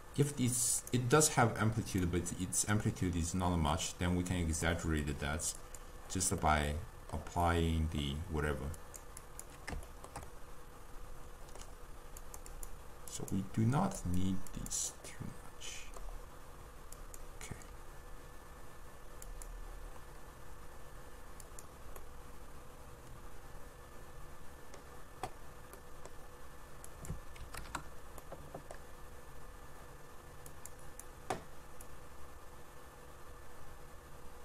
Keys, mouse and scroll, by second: 2.1-5.1 drag, 5.7 click, 6.5-8.9 middle drag, 8.9 click, 9.3 click, 10.0-12.3 shift+middle drag, 12.3 click, 12.6 click, 13.2-15.2 drag, 15.2-17.1 middle drag, 17.1 click, 19.3 click, 21.5 click, 22.1-25.1 middle drag, 25.8-26.9 middle drag, 26.9-28.3 drag, 28.3-30.6 middle drag, 30.6-34.4 drag.